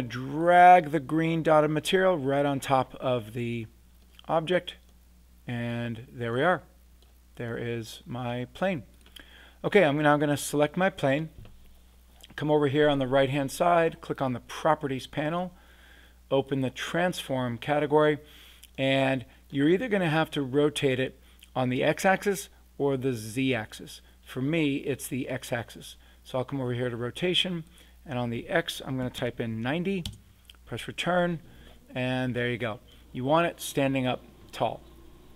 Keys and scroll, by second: 28.7-29.6 typing, 30.0 Return.